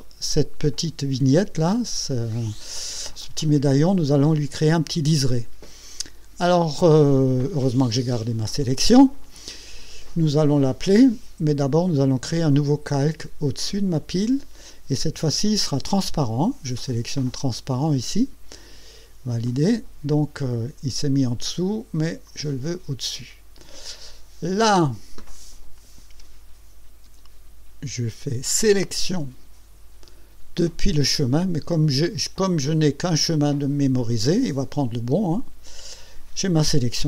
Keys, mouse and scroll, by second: 13.9 click, 19.5 click, 22.3 click, 28.8 click, 35.4 click.